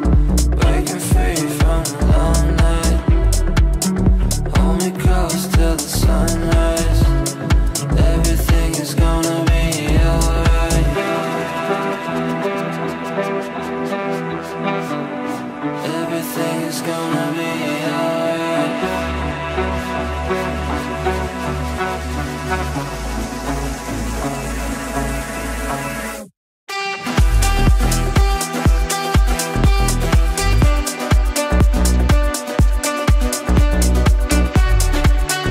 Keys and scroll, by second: 33.3 shift+F2, 33.6 Escape, 34.7 shift+F2.